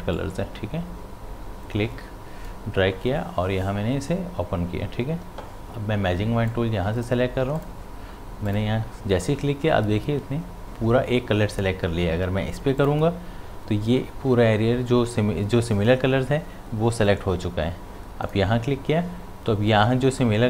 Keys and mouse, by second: 6.5 click, 12.7 click, 18.2 click.